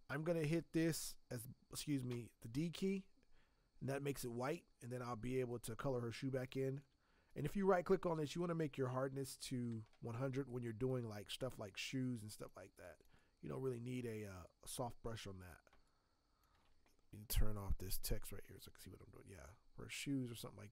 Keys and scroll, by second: 2.1 d, 15.7 space.